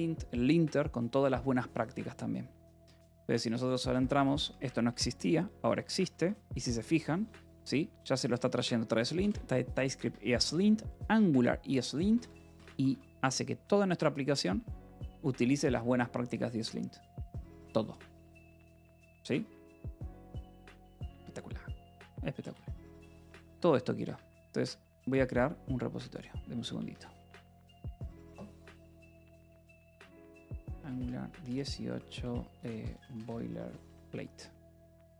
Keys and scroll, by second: 0.0 Return, 2.9 Return, 3.4-11.6 typing, 8.9 Escape, 10.0 Escape, 11.0 Escape, 12.6 j, 15.5 Escape, 16.3 k, 16.9 j, 19.2 k, 20.5 j, 22.6 Return, 23.9 Escape, 26.3-27.4 typing, 29.3-34.8 typing.